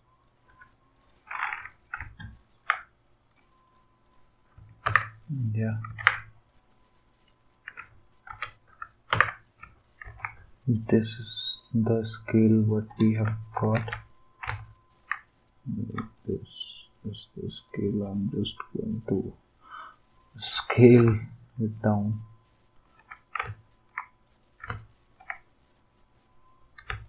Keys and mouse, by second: 0.5 Delete, 4.9 ctrl+x, 5.9 ctrl+z, 8.2 ctrl+g, 9.1 ctrl+x, 10.0 ctrl+n, 12.4 click, 13.7 ctrl+v, 16.1 shift+click, 20.8 click, 26.9 space.